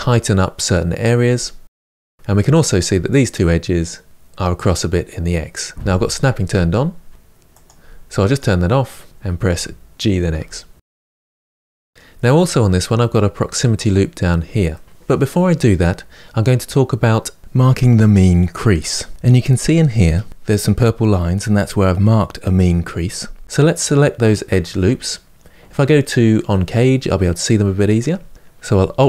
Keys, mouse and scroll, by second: 1.7 middle click, 2.3 click, 4.1 g, 8.1 click, 9.1 click, 9.3 g, 10.9-26.4 middle drag, 26.4 click.